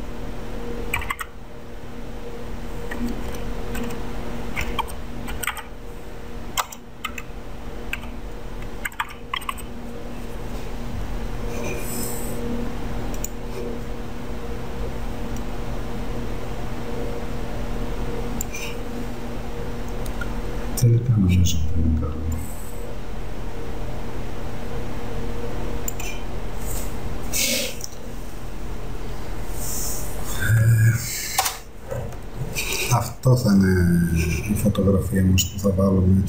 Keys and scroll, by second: 0.8-1.7 typing, 3.1-9.7 typing, 31.5 Return.